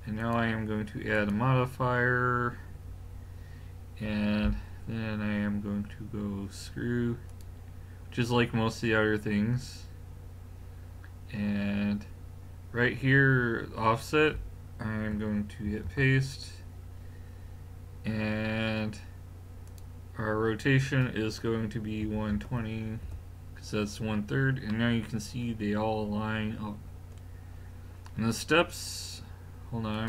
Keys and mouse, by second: 0.2-3.0 drag, 15.7 ctrl+v, 19.7 click, 24.7-25.1 middle drag, 26.6 middle drag, 29.9 click.